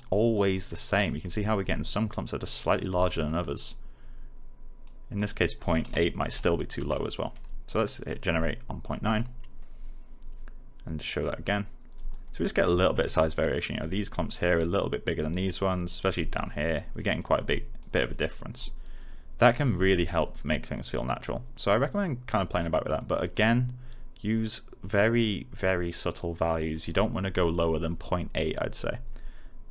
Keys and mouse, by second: 0.1 alt+right click, 0.5 alt+click, 1.1 alt+right click, 1.6-5.4 alt+drag, 6.2 9, 6.7 Return, 7.6 click, 11.0 click, 16.3 click, 16.9 alt+middle click, 17.4 alt+click, 18.0 alt+middle click, 18.5 alt+click, 22.9 click.